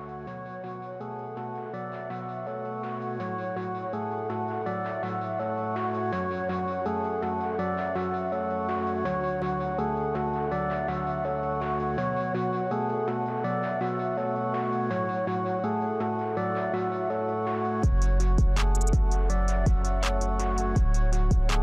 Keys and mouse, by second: 2.0 KP_1, 12.1 click, 15.1 click, 16.9 click, 17.5 click.